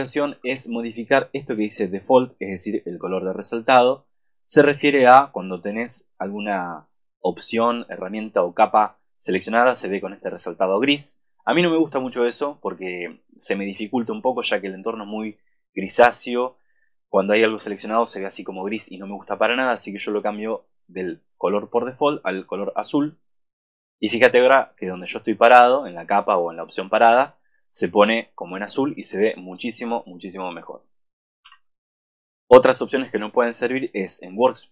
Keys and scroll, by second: 0.1 super+-, 0.2 super+=, 31.6 super+-.